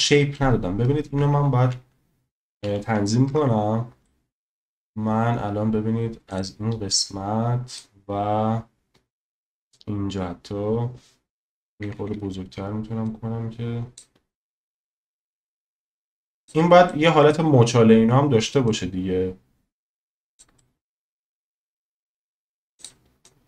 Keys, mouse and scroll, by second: 3.3 Tab, 4.1 middle click, 6.3 click, 7.9-9.5 drag, 11.7 ], 11.8 ], 12.0 ], 12.1 ], 13.1 click, 14.9 drag, 16.9 middle click, 18.8 click, 20.6-21.3 middle drag, 22.8 click, 23.2 click.